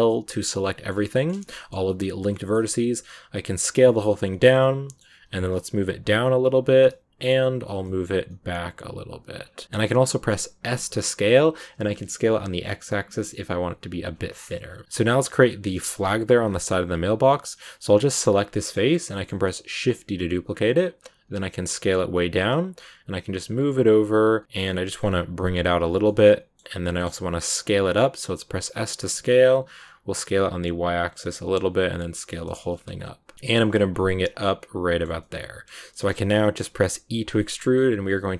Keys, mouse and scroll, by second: 0.0 middle click, 1.0 scroll up 1, 1.0 shift+middle click, 1.8-2.2 scroll up 1, 2.2 middle click, 4.6-5.8 middle drag, 6.8 middle click, 9.6 middle click, 9.6 s, 14.2-14.8 scroll down 12, 14.8 Tab, 15.2-15.7 scroll up 3, 15.7 shift+middle click, 16.3 scroll down 2, 16.9 right click, 17.7-19.8 middle drag, 19.8 shift+d, 24.4 middle click, 24.9 scroll up 2, 25.3 g, 26.0 middle click, 26.7 scroll down 1, 26.9-28.3 middle drag, 33.3 g, 34.3-36.0 middle drag, 36.0 g.